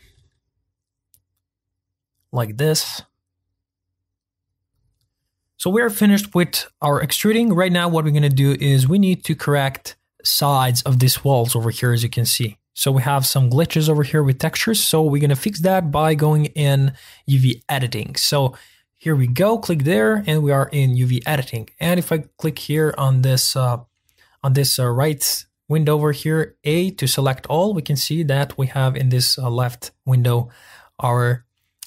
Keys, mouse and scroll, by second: 0.2 e, 4.7 right click, 11.4-12.1 middle drag, 12.1-14.1 scroll up 4, 14.1-15.4 middle drag, 15.4-16.2 scroll down 3, 16.2 scroll up 1, 16.5-17.5 scroll down 1, 17.5-23.2 drag, 23.2-23.5 scroll down 1, 23.5-25.7 scroll up 1, 26.7 a.